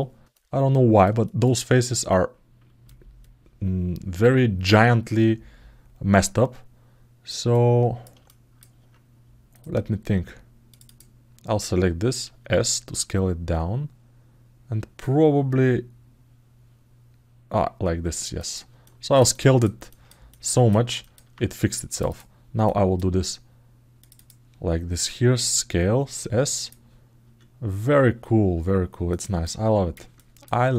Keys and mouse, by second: 0.4 ctrl+alt+middle click, 1.0 alt+shift+middle click, 1.4 alt+middle click, 1.8 ctrl+alt+middle click, 3.0-7.0 alt+middle drag, 7.3 ctrl+alt+middle click, 8.0 alt+shift+middle click, 9.3 click, 10.6 click, 18.6 alt+middle click, 19.6 ctrl+alt+middle click, 20.8 alt+shift+middle click, 21.8 click, 22.4 click, 23.8 click, 23.9 click, 29.2 alt+middle click, 29.9 ctrl+alt+middle click, 30.5 alt+middle click.